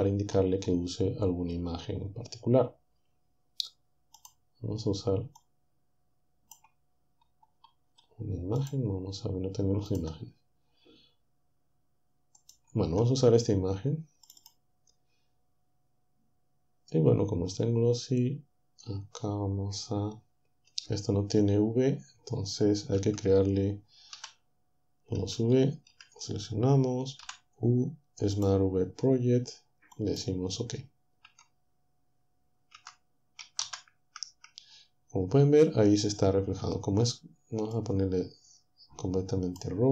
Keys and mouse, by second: 4.2 click, 5.4-6.9 drag, 8.6 click, 9.6 click, 12.4 click, 14.3 click, 23.0 Tab, 24.2 typing, 25.3-25.9 typing, 27.3 typing, 28.4 click, 30.0 click, 31.3 Tab, 32.7 Tab, 33.6 shift+z, 37.8-39.7 drag.